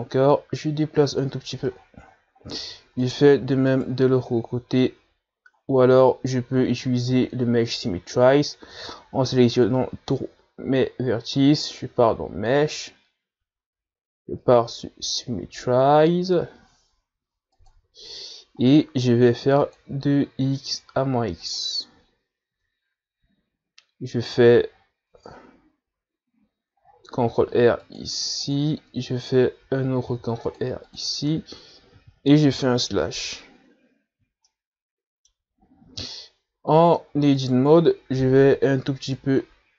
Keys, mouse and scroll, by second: 0.7 e, 1.6-2.8 drag, 2.8 scroll down 1, 3.3-3.6 scroll down 10, 3.6-4.3 scroll up 2, 4.3 alt+right click, 5.0 alt+right click, 6.9-7.2 scroll down 2, 7.2-7.8 scroll up 4, 7.8 a, 8.3 a, 10.0 a, 10.5 a, 13.8 click, 20.9-23.8 drag, 23.8 Tab, 24.4 a, 25.6-26.4 scroll up 4, 26.4 Tab, 28.7 ctrl+r, 30.7-31.3 scroll down 1, 31.3 ctrl+r, 32.4 Tab, 33.8 KP_Divide, 35.5 scroll down 1, 35.7-36.9 middle drag, 36.9 scroll up 1, 37.4-38.7 middle drag, 38.7 right click, 38.9 Tab, 39.3 a, 39.6 a.